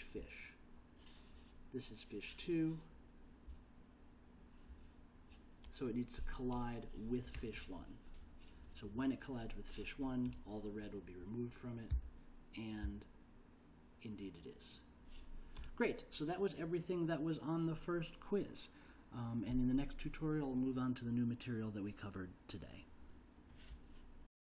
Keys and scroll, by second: 12.1 l.